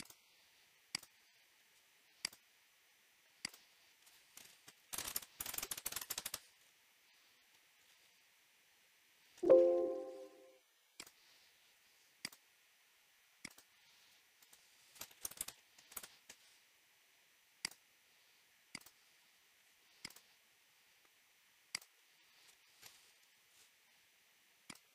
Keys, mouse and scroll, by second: 0.1 click, 1.0 click, 4.7-9.2 typing, 9.4 Escape, 11.1 click, 12.3 click, 14.5-15.2 scroll, 15.0-15.9 typing, 15.9 Return, 17.7 click, 18.8 click, 21.8 click.